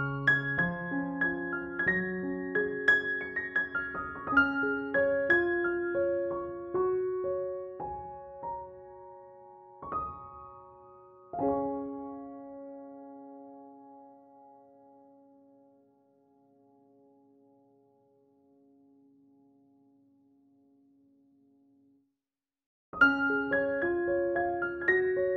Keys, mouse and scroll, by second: 0.3 ctrl+-, 1.0 ctrl+=, 2.0 ctrl+click, 2.5 ctrl+e, 2.8 space, 3.0 click, 3.2-3.5 space, 3.9 ctrl+j, 4.3 ctrl+u, 5.1-7.8 drag, 17.8 ], 18.0 ], 18.3-21.6 drag, 22.3 [, 22.4-22.9 drag, 23.7 ctrl+-, 24.5 space, 24.9-25.3 click.